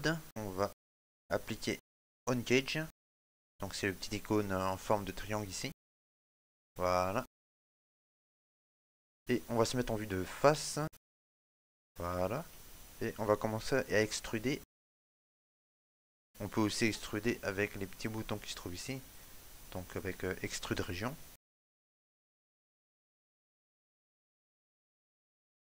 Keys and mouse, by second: 0.2 shift+middle click, 7.5 right click, 8.0 shift+middle click, 8.4 middle click, 10.7 KP_1, 11.0 shift+middle click, 11.5 ctrl+middle click, 12.0 shift+middle click, 14.7 e.